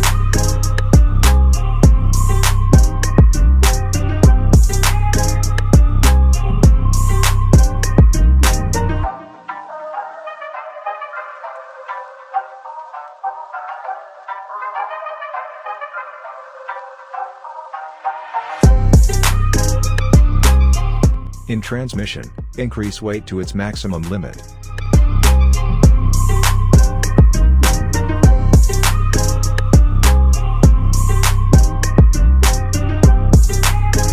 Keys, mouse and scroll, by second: 0.1 alt+middle click, 1.2 click, 8.7 scroll down 1, 20.9 click, 22.0 scroll down 1, 23.7 click, 24.8-25.4 scroll up 1, 26.1-33.0 drag, 33.0 scroll up 1.